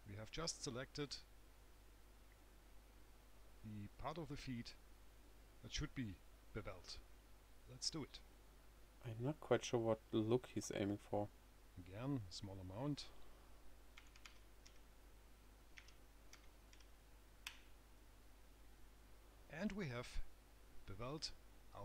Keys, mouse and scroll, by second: 1.7 scroll down 2, 2.1 right click, 8.5 click, 10.0 click, 13.2 click.